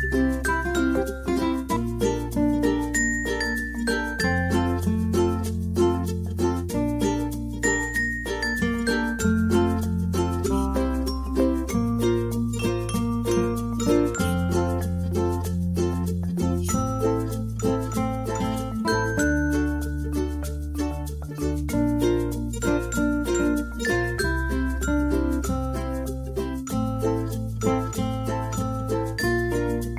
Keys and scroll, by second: 1.6-4.7 typing.